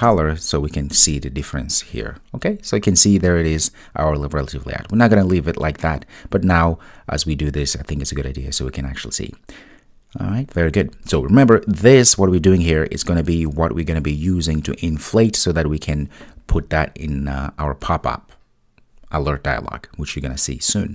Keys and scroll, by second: 0.1 Return.